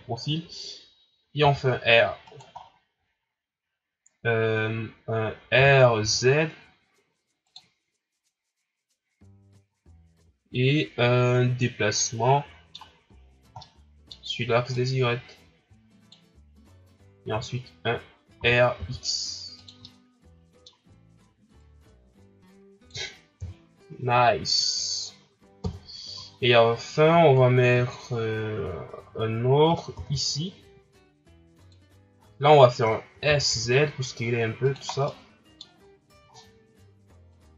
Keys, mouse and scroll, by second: 1.4 r, 2.5 scroll down 3, 2.9-3.5 scroll up 2, 5.5 r, 12.0-14.7 middle drag, 14.7-17.3 drag, 17.3 e, 18.4 r, 19.8-21.6 middle drag, 21.6-23.4 drag, 23.4 KP_1, 25.6 KP_1, 26.4-26.9 scroll down 10, 27.0 shift+scroll up 4, 27.9 shift+scroll up 3, 29.9 shift+d, 32.1 scroll up 1, 32.9 ctrl+scroll down 1, 33.2 s, 34.9 scroll down 2, 35.0 middle click, 35.8 scroll up 5, 36.3 ctrl+scroll down 5, 37.3 click.